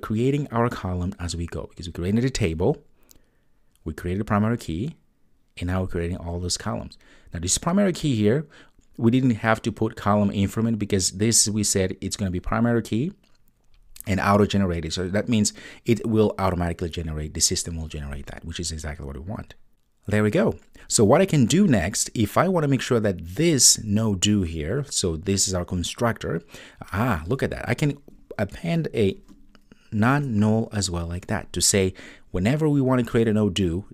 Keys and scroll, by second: 30.2 Return.